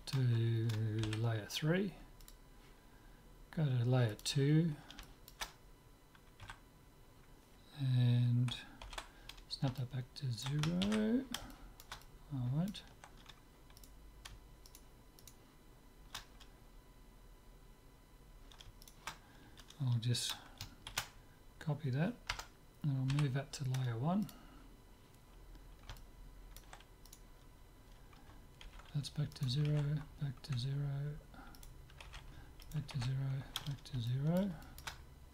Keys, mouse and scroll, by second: 1.1 m, 4.2-6.1 drag, 5.9-7.0 middle drag, 6.5 a, 8.9 alt+g, 9.8-14.0 middle drag, 10.9 ctrl+z, 14.0-17.2 right drag, 18.9-20.9 right drag, 21.0 shift+d, 23.1 m, 25.6-27.1 middle drag, 27.1 click, 27.1-28.9 right drag, 28.7 alt+g, 29.5-31.1 right drag, 29.8 alt+g, 31.6-34.4 right drag, 32.1 alt+g, 33.1 alt+g, 34.1 click, 34.4-35.3 middle drag.